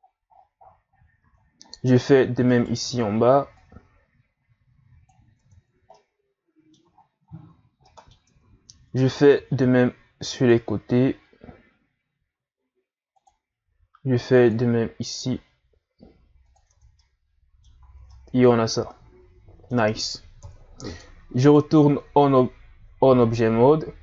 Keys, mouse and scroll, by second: 0.0-0.7 scroll down 13, 0.9 scroll up 1, 1.4 scroll down 1, 1.6 scroll up 3, 2.5 alt+right click, 3.5-5.3 drag, 5.3 Tab, 5.7 scroll down 2, 5.9-6.9 middle drag, 6.9-7.4 shift+scroll up 11, 7.6 scroll down 2, 7.8 middle click, 8.3 Tab, 9.3 ctrl+r, 13.6 ctrl+r, 17.0-17.8 middle drag, 17.8 a, 18.1-20.4 middle drag, 20.4 KP_1, 21.4 right click.